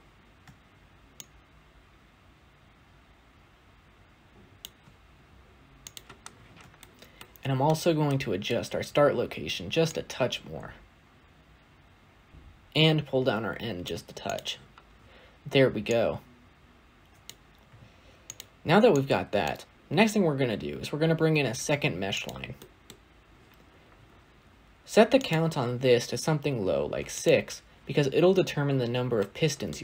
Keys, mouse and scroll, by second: 1.6-5.3 shift+drag, 6.1-6.6 scroll up 1, 6.6-10.6 shift+middle drag, 10.6-19.7 shift+drag, 19.7 shift+d, 27.0-28.2 drag, 28.2-28.9 scroll down 2, 29.0-29.8 shift+middle drag.